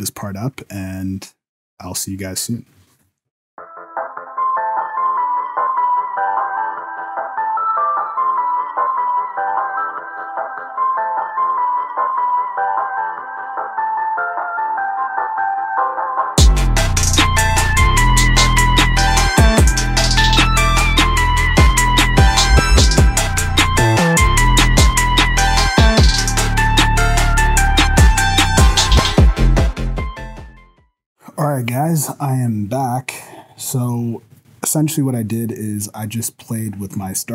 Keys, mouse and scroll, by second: 3.7 space, 5.4 click, 5.5 click, 5.8 click, 6.0 click, 6.0-8.5 typing, 6.8 shift+Left, 7.4 click, 7.6 shift+Left, 8.1 shift+Left, 8.2 click, 9.1 shift+Left, 9.2 click, 9.4 shift+Left, 10.1 shift+Left, 10.3 click, 10.3 scroll up 1, 10.5 shift+Left, 10.5 space, 11.8 shift+Left, 12.0 click, 12.1 KP_0, 12.3 space, 13.6 shift+Left, 13.8 click, 14.3 click, 14.4 KP_0, 14.7 click, 14.7 KP_0, 15.3 shift+Left, 15.3 space, 16.1 shift+Left, 16.3 click, 16.5 shift+Left, 17.8 click, 18.7 click, 19.7 space, 20.0 click, 20.1 shift+Left, 20.1 space, 21.2 click, 21.4 space, 21.5 shift+Left, 21.5 space, 24.5 click, 24.6 shift+Left, 24.6 space, 26.2 click, 28.2 click, 28.4 space, 28.5 shift+Left, 28.5 space, 29.4 click, 30.0 click, 31.0 space, 31.1 shift+Left.